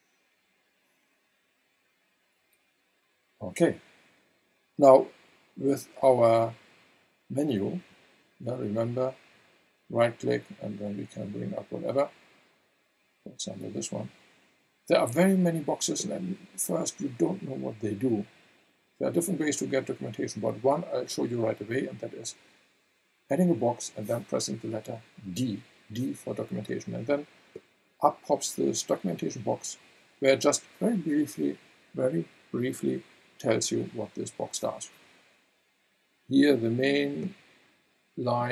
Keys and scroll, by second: 25.3 d.